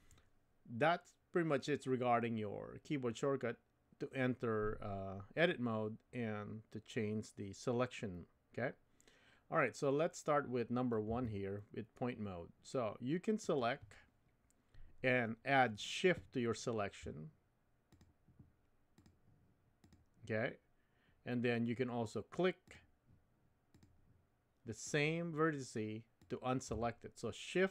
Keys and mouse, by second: 11.1 1, 13.5 click, 17.9 shift+click, 19.8 shift+click, 26.2 shift+click.